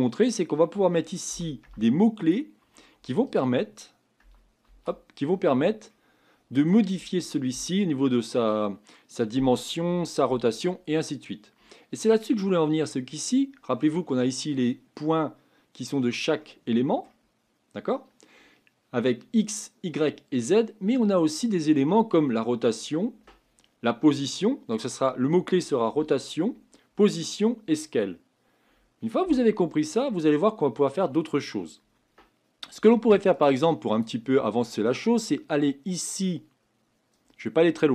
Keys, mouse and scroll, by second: 4.6-16.4 drag, 16.4-33.4 middle drag, 33.4 click, 34.0 click, 37.2-37.9 drag.